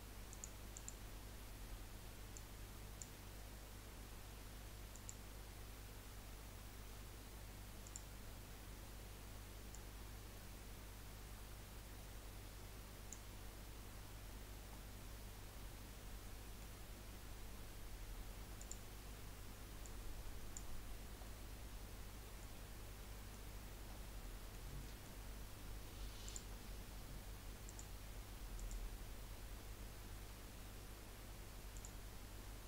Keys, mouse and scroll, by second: 0.3 click, 0.7 click, 4.9 click, 7.8 click, 13.9-14.3 scroll down 3, 14.3 scroll up 3, 14.7-17.8 middle drag, 18.6 click, 21.2-23.6 middle drag, 23.6-24.0 scroll up 2, 24.0 scroll down 4, 24.3-26.2 middle drag, 26.2 click, 27.7-30.8 drag.